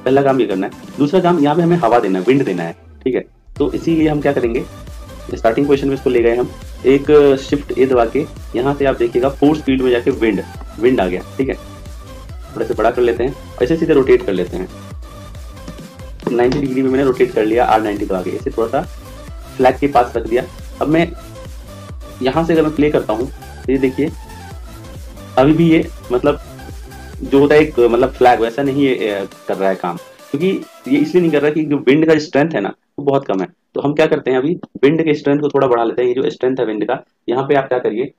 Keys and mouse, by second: 3.4 click, 7.7 shift+a, 11.9 s, 15.7 r, 17.6 click, 23.2-24.7 drag, 32.2-34.6 drag, 36.2 click.